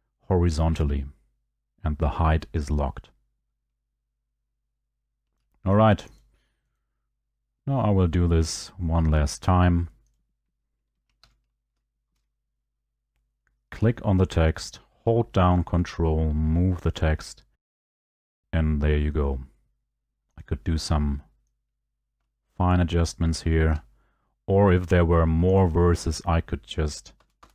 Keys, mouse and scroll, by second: 5.5 ctrl+click, 6.2 click, 6.8 right click, 10.2 click, 11.3 ctrl+v, 12.1 Escape, 17.6 click, 18.0 click, 20.4 click, 23.7 ctrl+click, 25.6 click, 26.2 click, 27.2 Return, 27.4 Return.